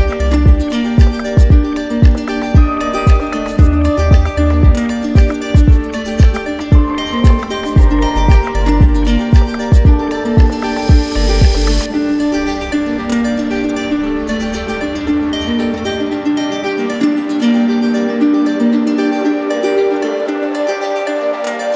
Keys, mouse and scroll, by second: 1.3 click, 3.8 click, 5.2 click, 7.3 click, 8.3 click, 9.0 q, 9.9 click, 11.2 click, 13.5 click, 14.7 click, 16.9 r, 19.1 click, 19.6 q, 20.5 click.